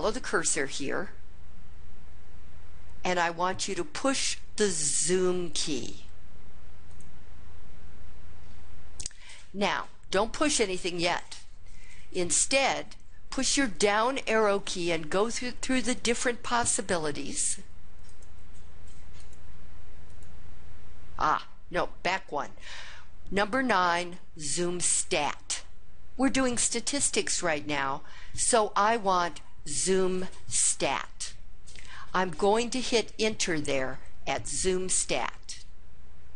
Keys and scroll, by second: 13.8 Down, 14.5 Down, 15.1 Down, 15.9 Down, 16.7 Down, 17.3 Down, 18.1 Down, 19.2 Down, 20.1 Down, 22.6 Up.